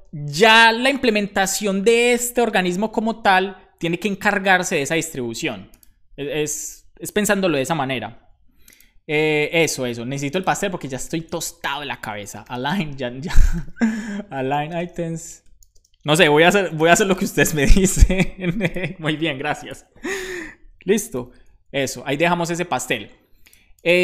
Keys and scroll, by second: 11.0 super+Right, 11.4 Left, 11.9-17.3 typing, 17.4 super+s, 21.6 super+s.